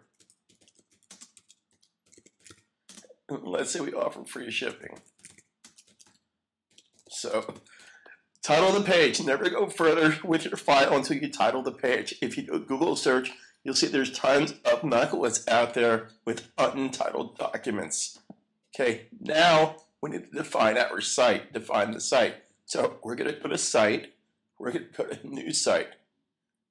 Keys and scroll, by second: 0.0-2.9 typing, 4.3-8.2 typing, 9.9 super+s.